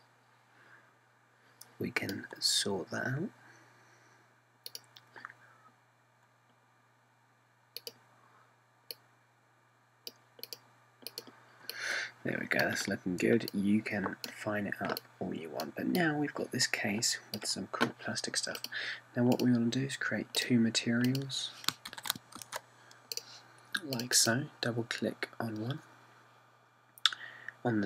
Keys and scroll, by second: 22.9 super+c, 23.4 super+v.